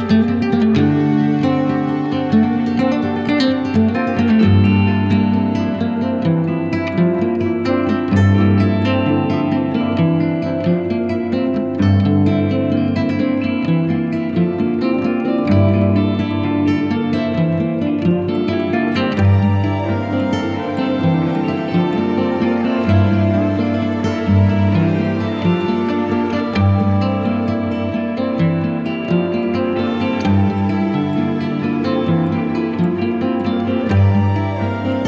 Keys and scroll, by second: 2.9 [, 4.6 [, 6.1 ], 8.0 [, 13.1 ], 17.2 z, 19.9 b, 20.5 ctrl+b, 28.3 z, 31.4 v.